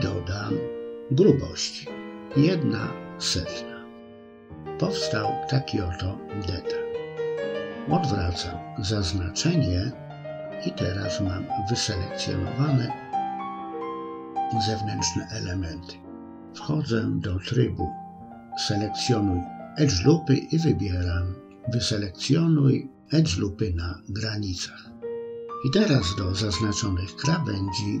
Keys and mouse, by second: 7.4 click, 9.5-12.8 middle drag, 14.0-21.1 drag, 21.8 middle click, 23.4 middle click, 25.4 ctrl+b.